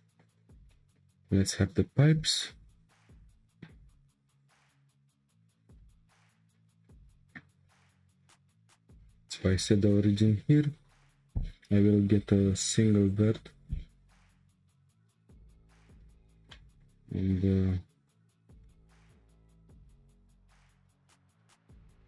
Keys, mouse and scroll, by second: 1.1-2.1 scroll up 2, 2.1 scroll up 1, 2.3 click, 3.1 Tab, 4.3 alt+click, 5.5 shift+s, 7.9 Tab, 9.3 shift+a, 14.6 1, 15.6 click, 16.3 shift+scroll down 1, 16.5-18.0 shift+middle drag, 18.0 click, 18.6-19.2 shift+middle drag, 19.2 scroll down 1, 20.2 e.